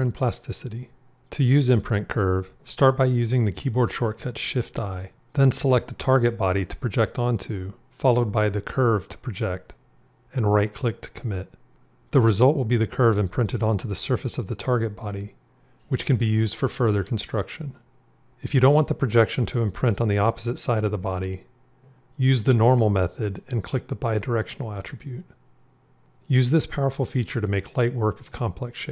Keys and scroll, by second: 3.8 shift+i, 19.3 shift+i.